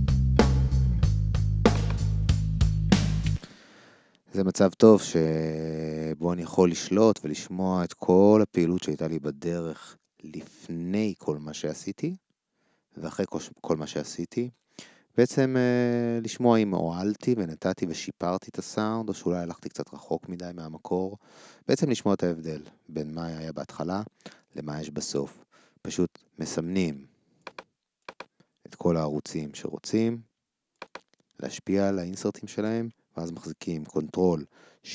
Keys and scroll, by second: 3.2 ctrl+alt+shift+space.